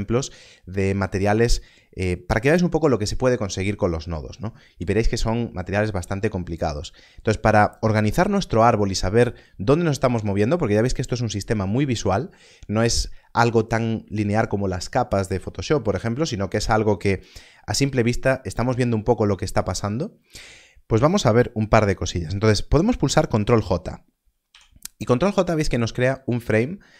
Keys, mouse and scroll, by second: 22.9 click, 24.4 ctrl+j, 25.3 click.